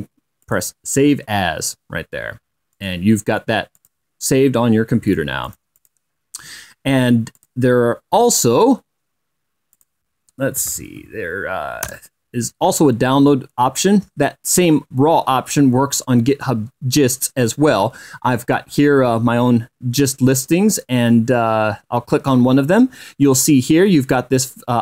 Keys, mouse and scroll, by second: 1.2 click, 3.5 click, 4.5 click, 5.8 click, 6.2-6.8 drag, 6.8-7.4 scroll up 1, 8.1 click, 9.7-10.2 scroll up 1, 10.5 click, 11.1-12.2 typing, 12.8 Return, 21.4 click.